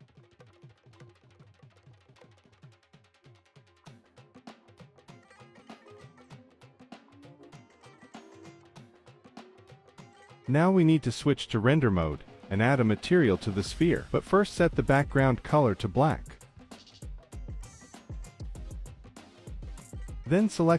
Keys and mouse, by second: 0.9 click, 2.4-3.8 drag, 4.0 click, 5.2 click, 5.2 middle click, 5.7-8.0 drag, 5.7-7.0 middle drag, 8.9-9.7 drag, 11.1 click, 12.0 click, 13.3 drag, 14.1 drag, 16.4 click, 18.9 z, 20.5-20.7 drag.